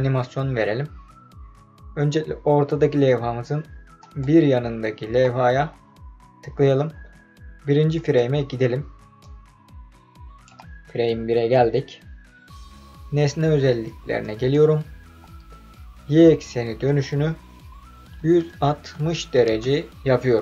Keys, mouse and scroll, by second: 4.0 click, 7.9 click, 9.2-10.4 drag, 14.2 click, 16.8-19.3 drag.